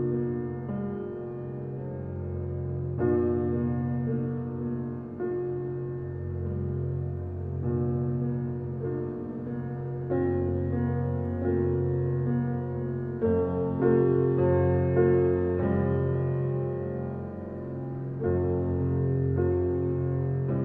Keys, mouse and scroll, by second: 1.5-3.0 middle drag, 3.5 alt+middle click, 3.9 shift+click, 4.8 alt+z, 5.1 click, 5.7 alt+middle click, 6.3 alt+middle click, 7.4 alt+z, 7.7-9.3 middle drag, 9.5-10.3 middle drag, 10.3 g, 13.0-14.0 middle drag, 14.0 click, 14.3 shift+drag, 14.6-16.1 middle drag, 18.3 g.